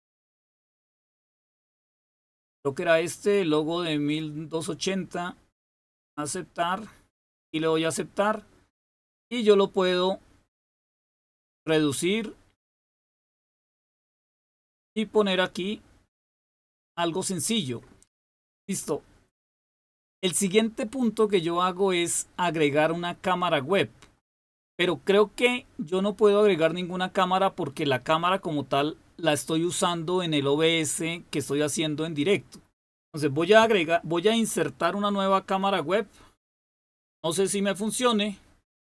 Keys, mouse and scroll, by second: 1.0-4.1 scroll down 1, 4.1 click, 5.8 click, 7.4 click, 11.1-13.7 drag, 14.0-16.6 drag, 17.2 click.